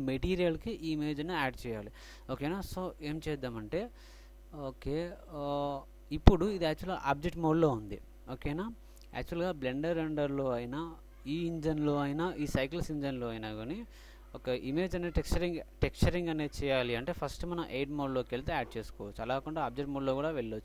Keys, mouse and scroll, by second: 10.9-12.6 drag.